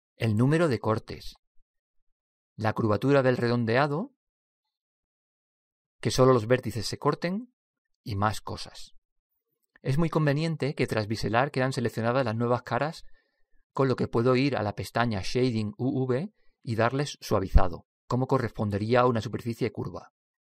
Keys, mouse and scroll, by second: 0.1-4.7 drag, 8.0-12.3 drag, 12.5 click, 15.9 click, 18.2 click.